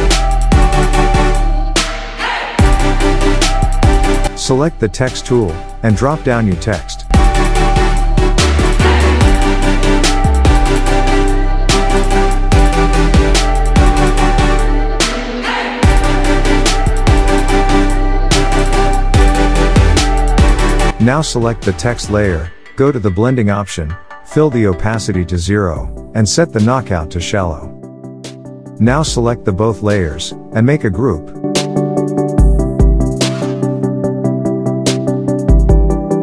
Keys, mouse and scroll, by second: 9.0-10.6 typing, 11.7-14.4 drag, 15.6 ctrl+t, 16.7-17.4 alt+shift+click, 19.8 shift+click, 28.2 click, 28.7-34.7 shift+drag, 31.5-34.6 drag.